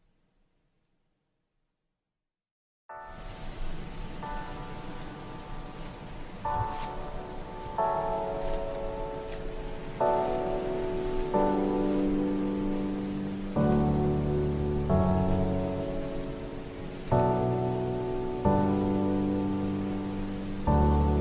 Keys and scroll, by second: 2.3 shift+F2, 3.0 F3, 9.6 shift+F2, 10.2 Escape, 14.6 shift+Home, 14.8 shift+Up, 15.4 Caps_Lock, 15.8-18.2 typing, 20.3 i.